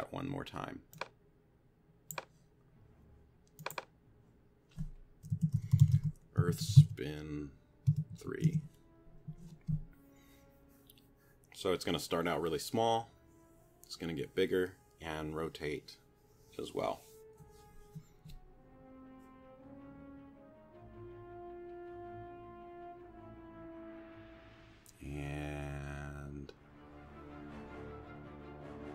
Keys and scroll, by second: 5.1-8.1 typing, 8.5 Return.